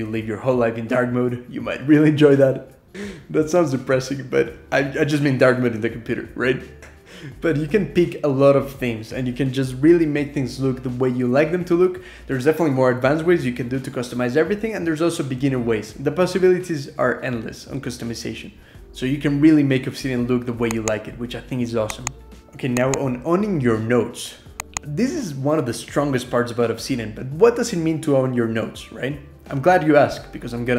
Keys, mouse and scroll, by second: 0.0-5.0 typing.